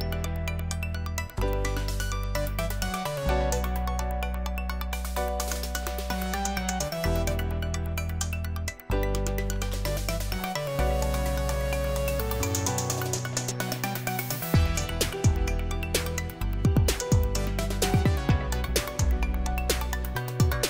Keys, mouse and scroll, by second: 1.2 Return, 4.8 click, 5.1 click, 5.8-7.2 typing, 8.3-12.5 typing, 16.1-18.2 scroll up 1, 18.2-19.3 scroll up 1, 19.3-19.7 scroll up 1.